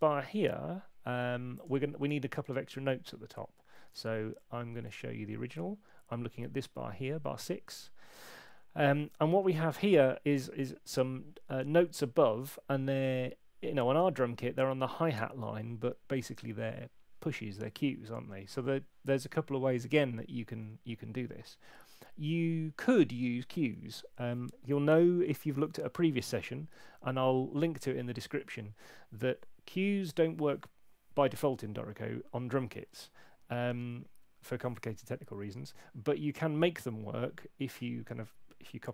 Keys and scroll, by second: 3.9 super+Tab, 9.7 F6, 20.5 F6.